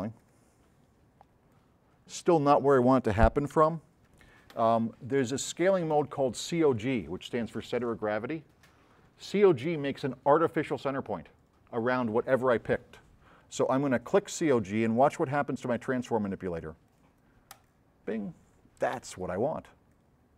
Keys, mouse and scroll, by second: 0.2 click, 1.6 click, 3.5 z, 17.6 click, 20.0-20.3 drag.